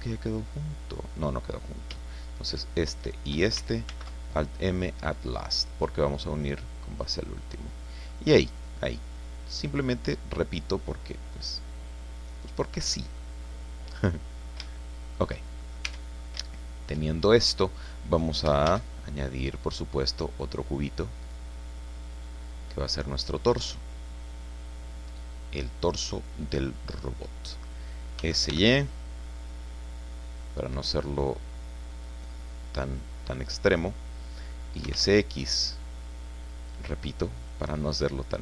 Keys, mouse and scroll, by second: 0.4 click, 3.0 shift+right click, 3.9 alt+m, 5.5 click, 6.1 scroll down 1, 6.6-8.2 drag, 8.2-8.6 scroll down 1, 8.6-13.4 drag, 13.7 scroll down 1, 13.9 click, 14.0 middle click, 14.6 shift+click, 14.7 shift+middle click, 15.2 shift+click, 15.6 shift+click, 15.9 shift+Tab, 16.2 shift+scroll down 1, 16.5 shift+click, 16.7 shift+middle click, 17.0-17.5 shift+scroll up 3, 17.5 middle click, 17.7 scroll down 2, 17.9 middle click, 18.7 shift+a, 21.2 click, 21.8-22.1 scroll down 1, 22.9-26.0 drag, 26.2-27.7 drag, 28.2 s, 28.5 y, 31.9 click, 32.3-33.6 drag, 33.9 scroll up 2, 34.6-35.4 typing, 37.4 click, 37.8-38.4 middle drag.